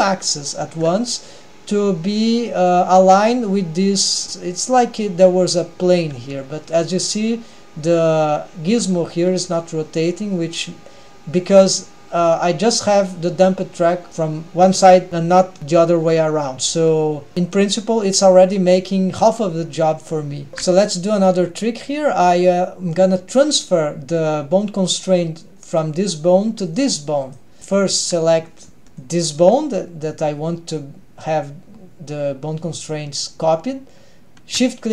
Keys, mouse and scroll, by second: 1.2-3.5 scroll down 1, 3.5 middle click, 3.5 scroll down 1, 4.2 g, 5.7-6.2 middle drag, 7.2 g, 8.3 middle click, 10.3 scroll down 1, 10.5 g, 13.6-14.5 scroll up 1, 17.3 g, 19.6-20.2 scroll up 2, 20.3 drag, 20.5 ctrl+alt+shift+super+r, 21.1 click, 25.0 click, 26.7 drag, 27.3 click, 27.7 drag, 29.1 click.